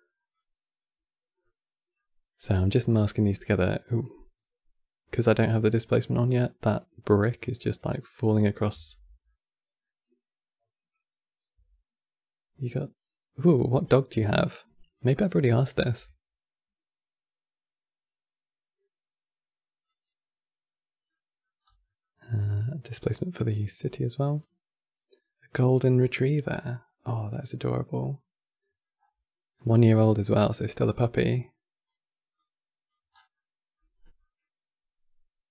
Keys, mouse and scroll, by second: 2.4-5.5 middle drag, 8.9-12.0 middle drag, 14.2 click, 17.8 shift+d, 20.8-21.3 middle drag, 21.3 scroll down 2, 21.5-22.7 middle drag, 22.7 click, 27.8 middle click, 28.7-29.2 scroll up 6, 29.2 middle click, 29.6-31.0 scroll up 5, 31.0 click, 32.0 click, 32.8 scroll down 6, 33.1-33.7 middle drag, 33.7 scroll down 1, 33.9-35.5 middle drag.